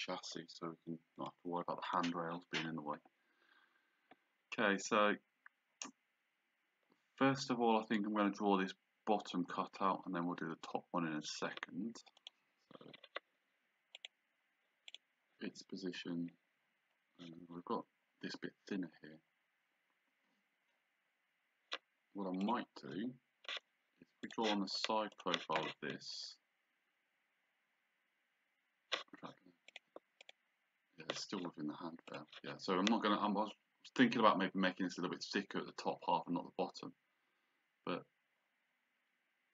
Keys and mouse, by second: 1.2 click, 12.2 click, 14.0 click, 22.4 click, 24.2 click, 29.7 click, 32.1 click.